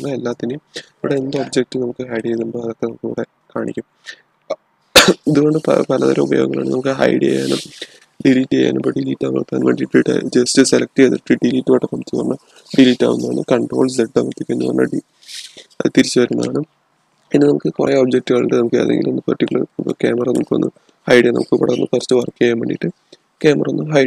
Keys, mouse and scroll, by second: 1.1-4.2 middle drag, 14.5 ctrl+z, 20.1-22.2 middle drag, 22.2 scroll up 1, 22.4 scroll down 1.